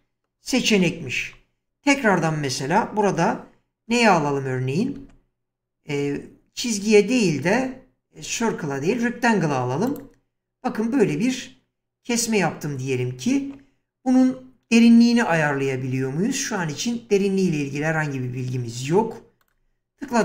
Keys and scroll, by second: 0.8 1, 3.9 space.